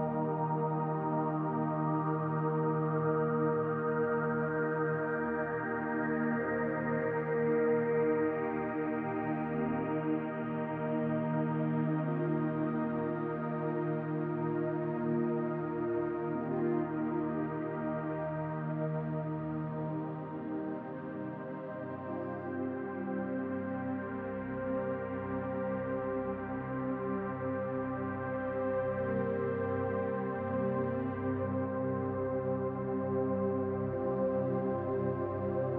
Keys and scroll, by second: 2.2 ctrl+a, 3.4 Return, 5.5 ctrl+a, 6.9 Return, 7.9 m.